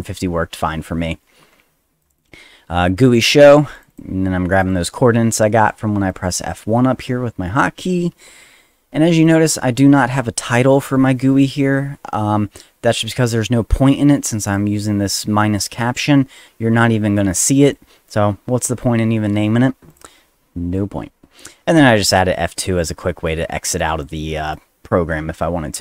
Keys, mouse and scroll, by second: 0.0 click, 2.0 click, 2.1 click, 3.7 click, 3.9 click, 4.5 click, 4.7 click, 6.1 click, 9.2 click, 14.3 click, 14.4 click, 17.6 click, 19.9 click, 21.8 click, 22.5 click, 23.8 click, 24.4 click.